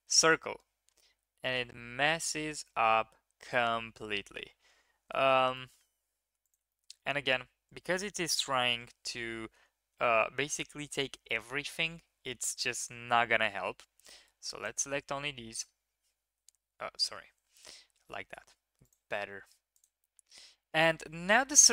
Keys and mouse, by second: 2.7-4.2 middle drag, 5.5 middle click, 5.9 ctrl+z, 6.4 click, 6.6 shift+click, 7.0 click, 12.9 3, 14.0-15.5 drag, 15.5 KP_1, 16.8 ctrl+KP_3, 18.0-18.3 shift+middle drag, 18.8-19.8 drag.